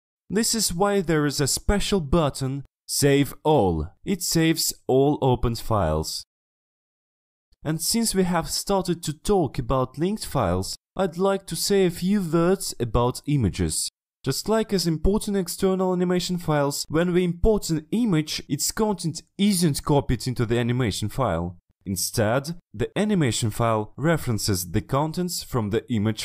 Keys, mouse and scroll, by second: 13.1-15.1 drag, 15.6 click, 17.7 click, 18.9-20.1 drag, 20.8 click, 21.1 click, 21.6 click, 25.0 click, 25.6 click, 25.6 ctrl+z, 25.8 click, 26.1 click.